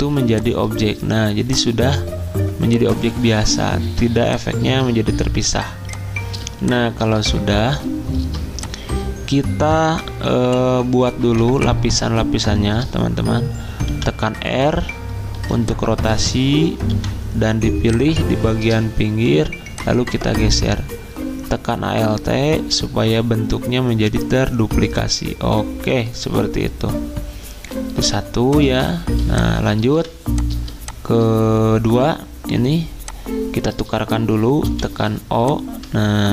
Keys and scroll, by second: 5.4 v, 9.9 v, 13.8 z, 13.9 r, 15.3 z, 16.9 r, 28.0 z, 29.9 v, 34.6 o.